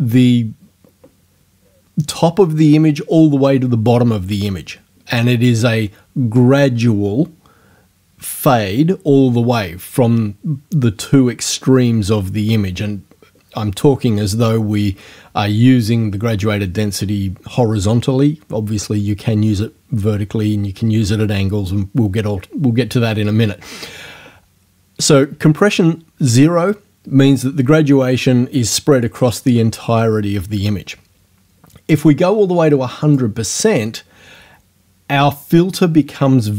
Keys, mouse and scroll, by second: 32.2-33.3 drag.